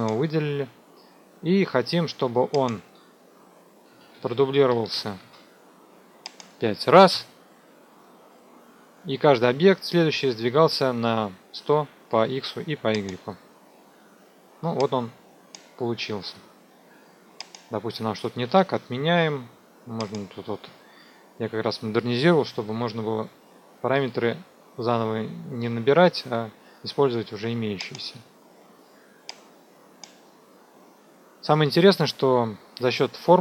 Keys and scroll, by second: 3.8 KP_1, 3.9 KP_0, 4.6 Tab, 4.9 KP_1, 5.0 KP_0, 7.1 KP_5, 18.4 ctrl+z, 22.2 KP_6, 22.4 KP_0, 22.5 Tab, 22.7 KP_6.